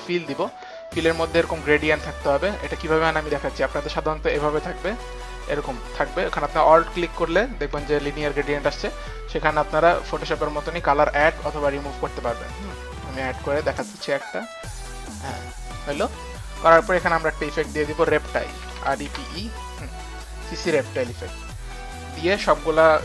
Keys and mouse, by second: 2.8 click, 3.9 alt+click, 4.6 alt+click, 6.6 alt+click, 6.9 alt+click, 8.7 alt+click, 12.4 click, 12.8 click, 13.8 click, 14.6 click, 17.6 click, 18.3-19.8 typing, 19.3 click, 21.0 click, 22.0-23.0 typing, 22.2 click, 22.8 click.